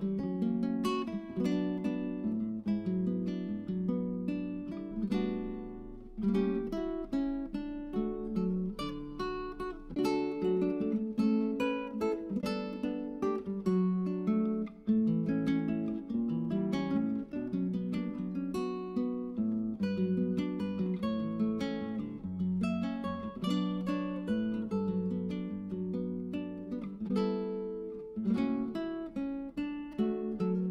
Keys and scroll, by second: 9.8 Tab, 10.3 Tab, 17.4-20.0 typing.